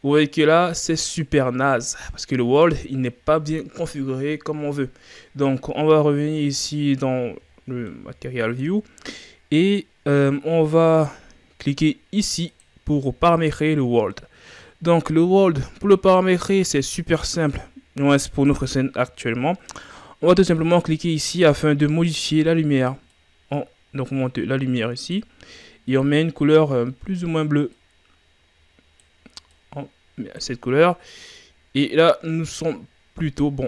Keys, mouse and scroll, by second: 0.1-3.2 middle drag, 6.5 click, 7.6-7.9 shift+scroll down 4, 7.9-12.5 middle drag, 12.5 click, 21.2-24.2 drag, 31.3-33.6 middle drag.